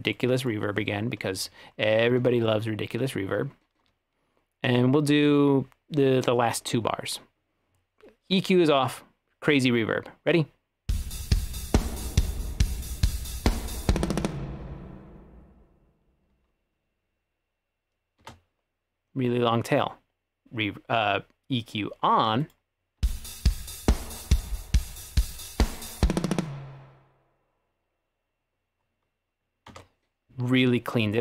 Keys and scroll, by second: 10.9 space, 18.3 space, 23.1 space, 29.8 space.